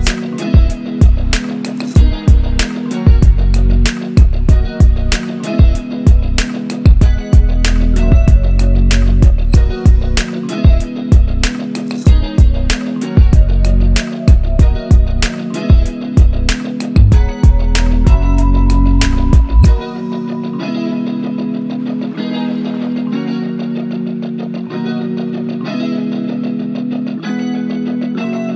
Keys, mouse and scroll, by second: 0.1-1.1 scroll down 1, 1.1 click, 2.5-3.3 scroll up 1, 3.3 click, 5.2 click, 6.3 ctrl+z, 6.6 click, 7.5 ctrl+z, 7.9 click, 8.7 ctrl+z, 9.2 click, 9.3 scroll down 1, 9.7 click, 11.1-13.1 shift+drag, 15.5 c, 15.8 click, 16.7 Down, 17.2 click, 20.0 scroll up 1, 20.5-21.6 drag, 22.0-22.4 scroll down 1, 22.4 click, 23.9-24.3 shift+click, 25.1 Down, 25.3 Right, 25.9 scroll up 1, 26.4 Right.